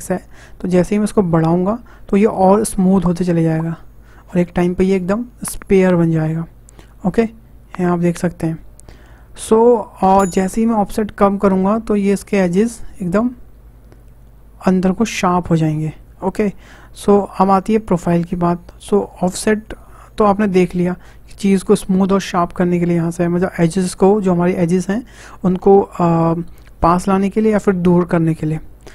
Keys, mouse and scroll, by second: 0.6-3.6 drag, 18.9-21.9 drag.